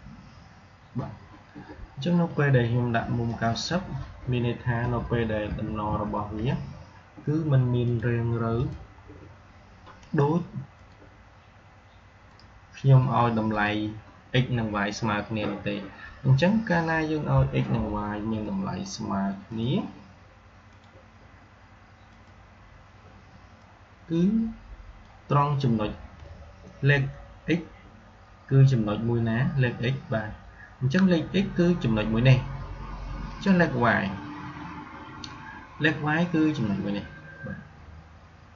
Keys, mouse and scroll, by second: 3.1 click, 5.3 ctrl+d, 7.7 click, 9.0 scroll up 1, 10.6 click, 19.4-27.4 drag, 33.2 click.